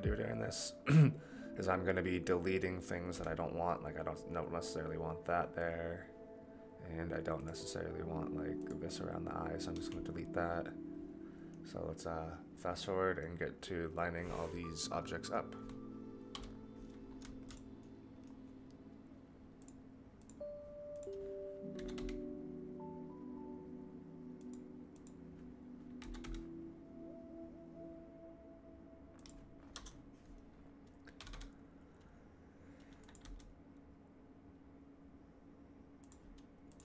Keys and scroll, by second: 3.1 Delete, 9.7 Delete, 16.3 KP_3, 21.7 g, 26.0 g, 29.7 KP_0, 31.1 r, 33.2 g.